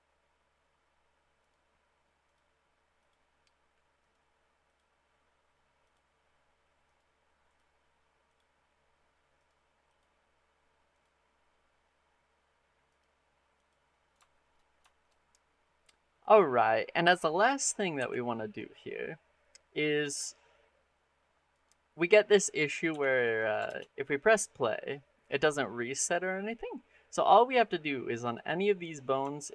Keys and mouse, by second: 1.2-2.2 right drag, 3.9 right click, 6.8 right click, 8.1 click, 9.3 click, 12.8-13.5 drag, 14.1 shift+middle click, 14.7 shift+middle click, 17.8 r, 21.3 click, 22.7 r, 23.2 click, 23.5 shift+space, 29.2 shift+click.